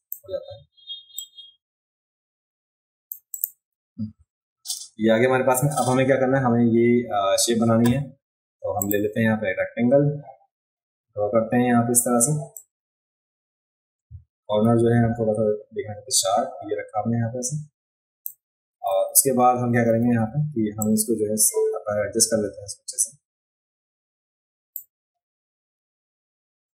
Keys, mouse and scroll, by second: 1.2-3.1 drag, 3.3 click, 4.5-5.7 alt+scroll up 2, 8.8 click, 12.5-18.2 drag, 20.8-24.7 drag, 26.1 alt+scroll down 2.